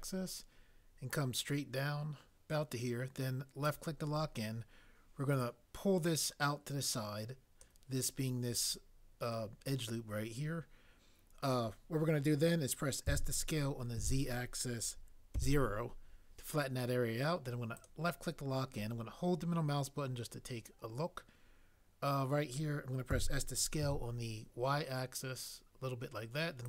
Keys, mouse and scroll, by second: 13.0 s, 13.9 z, 15.4 0, 23.1 s, 23.8 y.